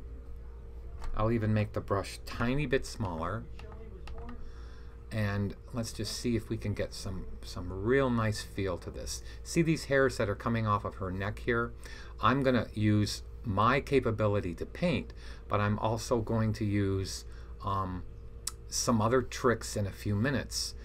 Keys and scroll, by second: 2.9-3.9 typing.